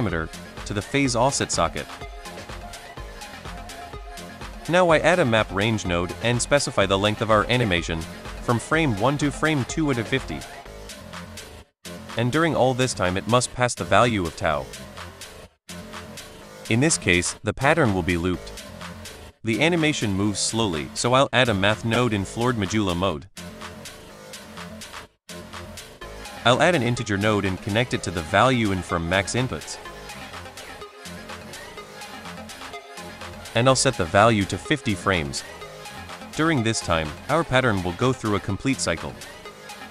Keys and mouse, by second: 1.1 click, 3.2 middle click, 3.8 shift+a, 6.7 middle drag, 7.4-8.5 drag, 9.4-10.5 drag, 11.6-12.9 drag, 13.8 space, 16.6 space, 17.2 middle drag, 18.0 drag, 18.4 click, 18.9 middle drag, 19.6 middle drag, 19.8 shift+a, 22.2 click, 22.6-24.9 drag, 25.3 middle drag, 26.1 shift+a, 28.8 click, 29.7-30.3 drag, 31.2-32.6 drag, 33.3 middle drag, 33.8-34.8 drag, 35.5 space, 39.3 space, 39.8 middle drag.